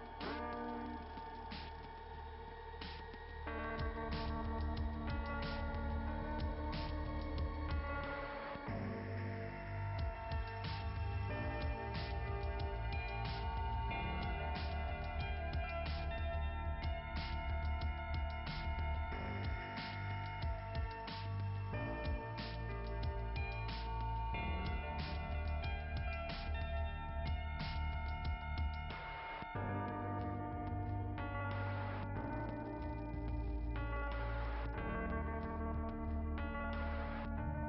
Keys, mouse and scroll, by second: 0.5 click, 6.9 click, 9.9 click, 20.8 click, 23.0 click, 23.3 click, 23.6 click, 25.9 click, 27.0-28.0 scroll down 2, 30.7 click, 31.7 click, 31.8 click.